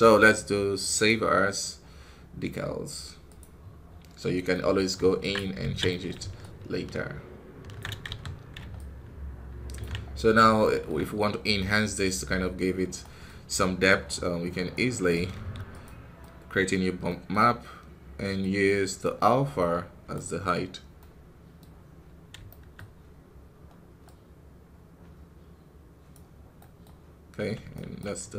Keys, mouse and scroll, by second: 1.0 scroll down 1, 1.0-4.4 drag, 4.4 middle click, 5.2 ctrl+Tab, 5.5 alt+a, 5.8 middle click, 6.3-7.9 ctrl+alt+drag, 7.9 KP_1, 8.3-8.6 scroll up 1, 8.6-9.9 ctrl+alt+drag, 9.9 scroll up 4, 10.5-12.0 shift+middle drag, 12.0 scroll down 1, 14.6 right click, 15.2 shift+d, 17.1-18.3 middle drag, 18.3-20.1 drag, 20.9 middle click, 21.6 scroll up 1, 22.4-24.1 shift+middle drag, 24.1-27.9 drag, 27.9 ctrl+right click.